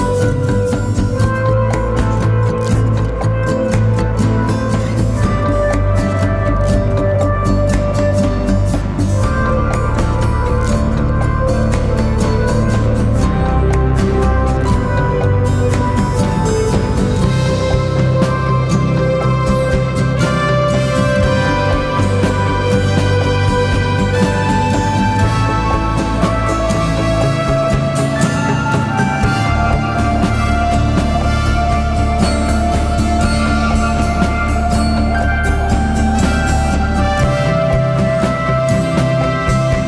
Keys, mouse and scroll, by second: 12.4 ctrl+t, 13.5 alt+shift+click, 16.2 alt+shift+click, 20.1 ctrl+t, 23.1 alt+shift+click, 25.7 Return, 26.7 Down, 27.2 Down.